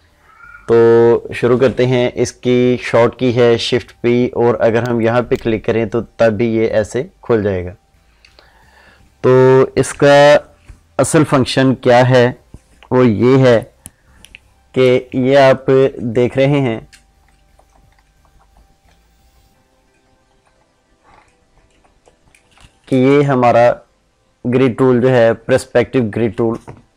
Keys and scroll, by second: 23.0 ctrl+0.